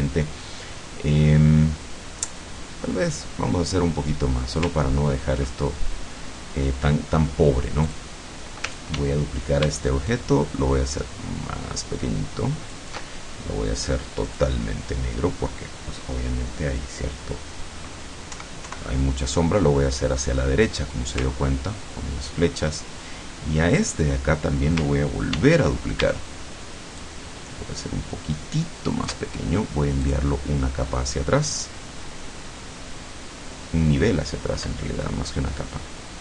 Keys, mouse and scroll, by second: 0.7-1.1 scroll up 2, 4.0 scroll up 2, 5.0 ctrl+scroll up 2, 5.5-6.6 ctrl+drag, 7.9 click, 9.0 ctrl+d, 10.1-13.0 ctrl+shift+drag, 14.4 click, 18.4 Right, 21.4-21.8 ctrl+scroll up 2, 23.8 click, 25.4 ctrl+d, 27.1-29.4 ctrl+shift+drag, 30.1 click.